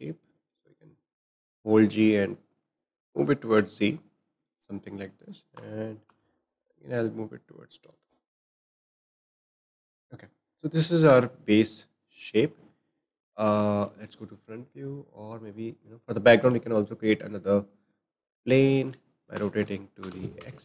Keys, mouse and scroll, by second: 3.2-3.5 z, 3.7-4.5 drag, 5.6 g, 9.1 click, 9.4-9.7 scroll down 2, 9.7-10.5 shift+middle drag, 10.5-10.9 scroll up 4, 10.9-12.8 shift+middle drag, 12.8 `, 14.6 middle click, 14.8-15.3 scroll down 4, 15.3-16.5 shift+middle drag, 16.5 shift+a, 19.4 r.